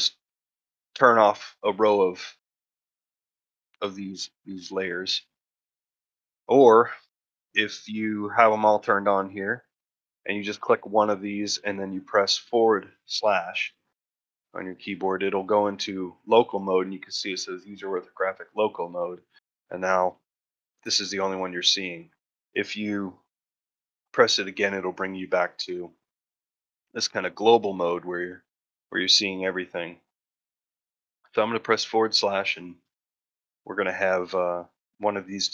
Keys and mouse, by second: 4.0 click, 7.4 click, 10.3 click, 10.9 middle drag, 11.3 shift+middle drag, 11.6 middle click, 13.2 /, 14.5 middle drag, 14.9-15.3 shift+middle drag, 19.0 middle drag, 19.4 shift+middle drag, 19.7 ctrl+middle drag, 19.9 shift+middle drag, 20.4 middle drag, 21.5 middle drag, 22.1 shift+middle click, 23.6 /, 24.3-25.0 middle drag, 27.9 middle drag, 28.3 shift+middle drag, 29.6 middle drag, 30.0 shift+middle drag, 30.4 middle drag, 31.6 KP_Divide, 32.1 middle drag, 32.5 shift+middle drag, 32.9-33.4 ctrl+shift+middle drag, 33.8 shift+middle drag, 35.2-35.5 shift+middle drag.